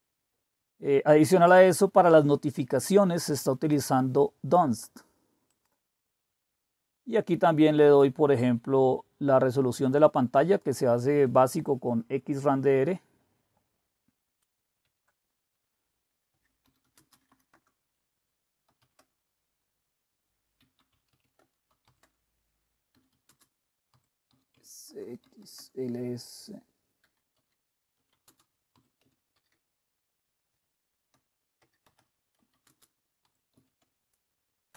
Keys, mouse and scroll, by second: 1.2 click, 2.5-4.6 drag, 5.5 click, 6.1-7.6 scroll up 1, 8.4-10.7 drag, 11.7-13.0 drag, 13.0-14.9 scroll up 1, 14.9-16.0 scroll up 1, 16.0-16.8 scroll up 1, 16.6-19.2 typing, 20.3-34.7 typing, 24.5 Tab, 33.8 Tab.